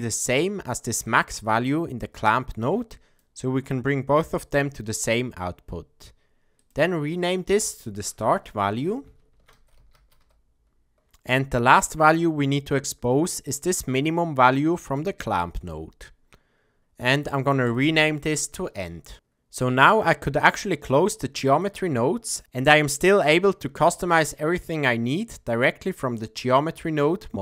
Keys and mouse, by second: 1.1-3.2 drag, 6.6 click, 7.5-11.0 drag, 12.8-15.0 drag, 17.7-19.1 drag, 20.2-21.7 drag.